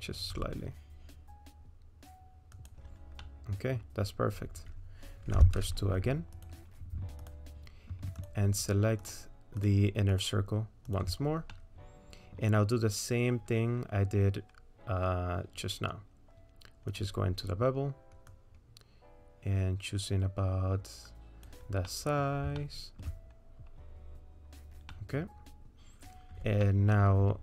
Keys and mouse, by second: 0.3 s, 3.2 click, 5.4 2, 6.4 click, 9.1 ctrl+click, 10.2 ctrl+click, 11.5 middle click, 16.9 click, 18.3-21.5 drag, 21.9 middle click, 22.6 shift+middle click, 24.9 middle click, 26.8 middle click.